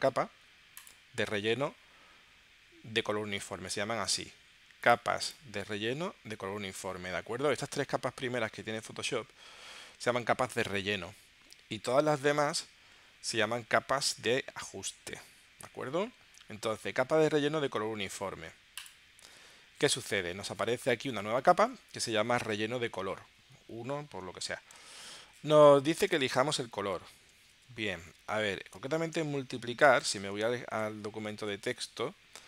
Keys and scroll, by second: 27.5 super+Tab, 28.8 space, 29.9 space, 30.9 super+Tab.